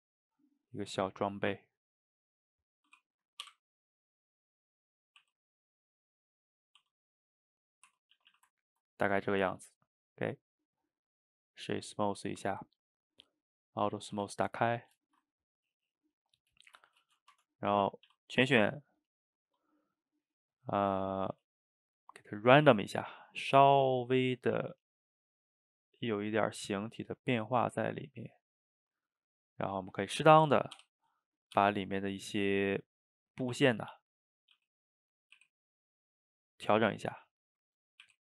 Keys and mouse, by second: 2.6 middle click, 3.5 i, 7.7 middle click, 7.9 Tab, 8.2 a, 8.3 a, 8.6-9.6 ctrl+middle drag, 9.6 click, 9.9-12.9 right drag, 13.8 click, 14.1 a, 14.3 a, 14.8 click, 15.1 shift+right click, 15.3-16.7 ctrl+middle drag, 16.7 shift+right click, 16.9-17.3 ctrl+shift+middle drag, 17.3 Tab, 18.1 a, 18.6-21.7 right drag, 22.5-24.9 middle drag, 24.9-27.9 shift+drag, 29.1-29.9 middle drag, 29.9 click, 30.8 o, 31.0-31.6 middle drag, 31.6 g, 32.4-33.0 middle drag, 33.0 click, 33.2-33.5 middle drag, 33.5 Tab, 33.9 click, 34.1-34.6 middle drag, 34.6 g, 35.4 r, 36.1 middle click, 36.7 click, 36.9-38.1 middle drag, 38.1 r.